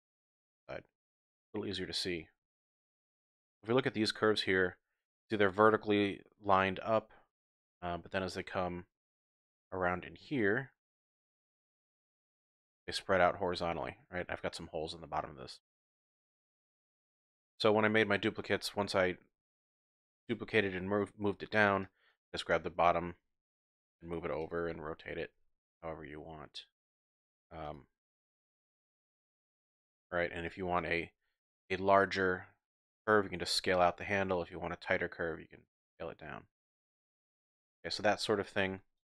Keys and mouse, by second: 0.4 shift+click, 0.6-0.9 typing, 1.4 ctrl+click, 2.3-3.3 typing, 2.7 click, 3.3 drag, 4.0 shift+drag, 4.6-5.1 shift+drag, 6.5-7.1 ctrl+drag, 7.5-7.9 drag, 8.0 typing, 8.1-8.9 shift+drag, 10.1 Tab, 10.1-11.0 typing, 10.4 click, 11.0 click, 11.4 click, 11.4 middle click, 11.6 click, 11.7 middle click, 11.8 ctrl+click, 12.1 ctrl+middle click, 12.5 shift+click, 13.0 click, 13.0 typing, 15.8 click, 16.2-17.0 typing, 16.8 middle click, 17.5-17.8 shift+drag, 18.3 click, 18.6 Tab, 18.9 click, 19.0 middle click, 19.5 shift+middle click, 20.2 Tab, 20.6 click, 20.9 Tab, 21.9 click, 23.2 g, 24.4 click, 24.7 r, 25.3 r, 27.6 click, 28.2 s, 29.0 click, 29.4 middle click, 30.1 shift+middle click, 30.3 shift+click, 33.5 s, 37.2 click, 37.9 shift+click, 38.4 Tab, 39.0 shift+click.